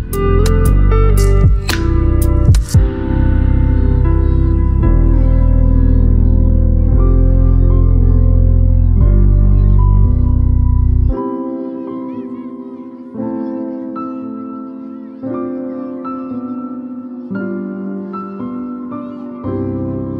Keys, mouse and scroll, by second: 0.8-6.0 typing, 7.1 Return, 9.4 click, 14.8 right click, 15.5-20.1 drag.